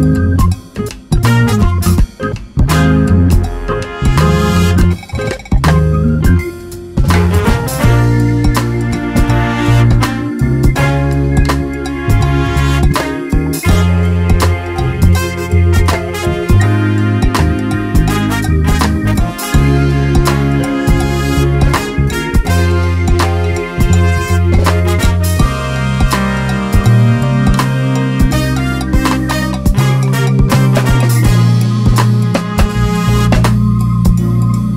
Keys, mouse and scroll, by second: 1.9-3.0 drag, 4.1 click, 4.5 Delete, 6.2 shift+a, 7.6-7.9 ctrl+shift+drag, 9.2-12.1 drag, 12.0 shift+a, 12.8-13.2 drag, 14.5 scroll up 1, 14.7 scroll down 1, 15.1 scroll up 1, 15.7 scroll down 2, 16.6 scroll down 2, 16.8-17.5 scroll up 2, 17.5-20.1 drag, 21.5 scroll down 1, 22.1 ctrl+shift+click, 23.0 click, 23.7 scroll up 1, 24.3-27.1 drag, 27.4 click, 33.1 ctrl+shift+click, 33.4-33.8 scroll up 1, 34.5 click.